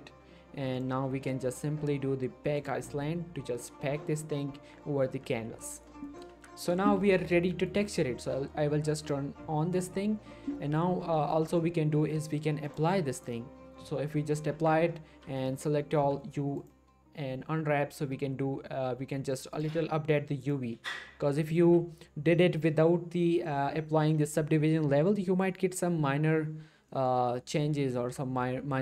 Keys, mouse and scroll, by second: 0.8 click, 5.7 middle click, 6.0 shift+middle click, 6.3 Tab, 6.6 middle click, 6.9 shift+middle click, 7.6 right click, 9.0 click, 9.9 middle click, 11.2 shift+middle click, 12.7 click, 14.3 middle click, 14.5 Tab, 15.1 a, 16.0 u, 16.6 click, 19.5 click, 20.5 click, 21.4 middle click, 21.6 Tab, 26.7 scroll down 1, 27.1 middle click, 27.5-27.9 scroll up 1.